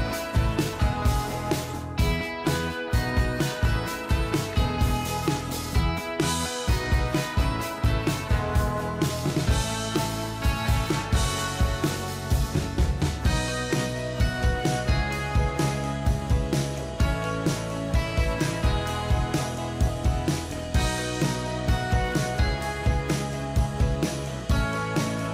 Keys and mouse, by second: 1.9 double click, 8.9 2, 10.8 ctrl+j, 13.4 ctrl+click, 20.6 right click, 23.2 shift+click.